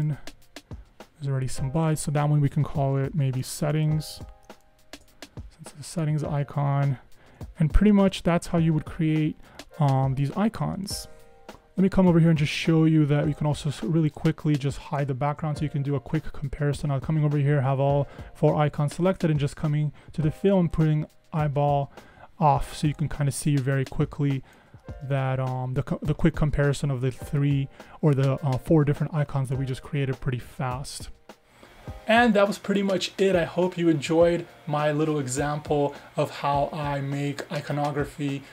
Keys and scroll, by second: 3.2-5.0 typing, 7.0 super+0, 9.7 super+=, 10.0 super+=.